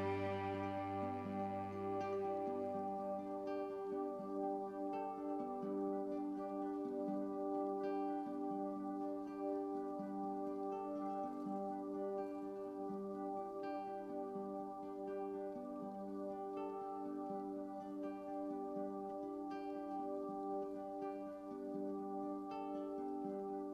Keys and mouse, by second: 0.2 click, 1.1-2.9 drag, 3.1 click, 4.6 click, 4.9 click, 5.4 alt+click, 6.2 ctrl+alt+click, 6.8 click, 7.8 click, 8.3 click, 9.3 click, 10.2 r, 10.5 x, 11.7 click, 12.1-23.7 alt+drag.